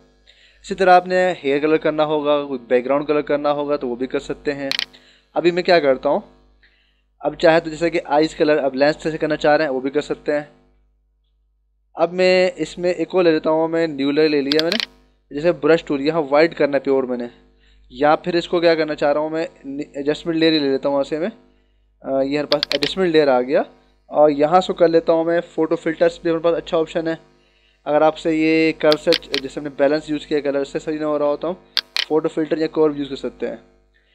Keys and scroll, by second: 10.3 ctrl+=, 15.5 ctrl+=, 19.0 ctrl+alt+z.